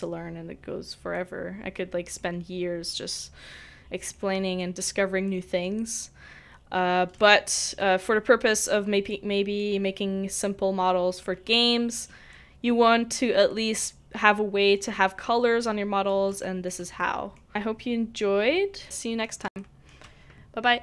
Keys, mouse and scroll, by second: 18.8 middle click.